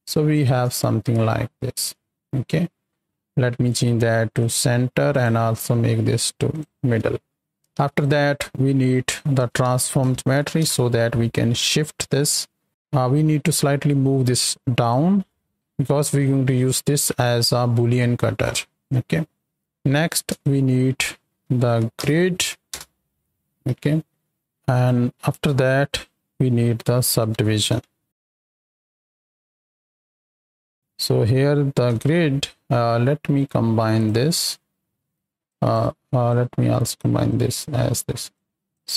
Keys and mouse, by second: 0.3 ctrl+shift+click, 1.2 shift+middle click, 1.2-1.7 shift+drag, 2.1 shift+middle click, 2.6 middle click, 3.6-4.5 drag, 5.0-6.6 drag, 7.0 shift+middle click, 7.7 shift+a, 12.1 click, 14.7 click, 16.1 middle click, 19.6 middle click, 20.0 shift+a, 24.4 click, 29.9 drag, 30.4 ctrl+shift+click, 31.8 KP_7, 33.4-34.0 drag, 34.4 ctrl+shift+drag, 35.4 click, 36.2-37.0 drag, 37.3 click, 38.3 click.